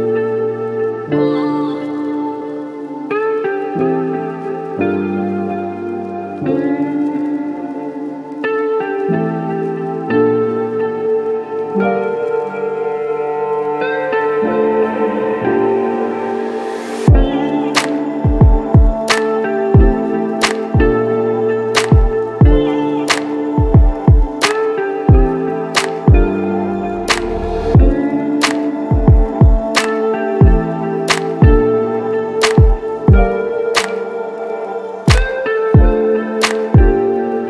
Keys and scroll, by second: 3.3 b, 10.8 ctrl+s, 15.8 ctrl+0, 16.7 space, 20.6-22.0 typing, 25.4 space, 30.9 space.